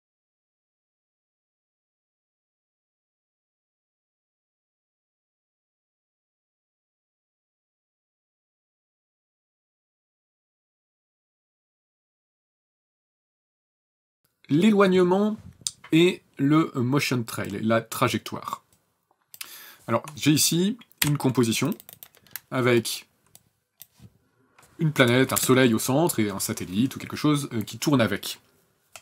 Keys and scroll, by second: 7.9 shift+n, 8.1 KP_0, 14.2 ctrl+s, 21.1 n, 25.4 KP_0.